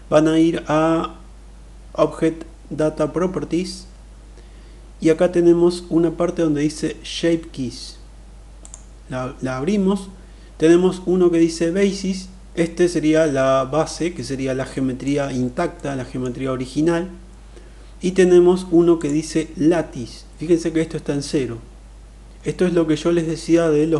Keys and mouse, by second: 8.3 click, 14.3-14.8 middle drag, 15.5 middle click, 18.6 click.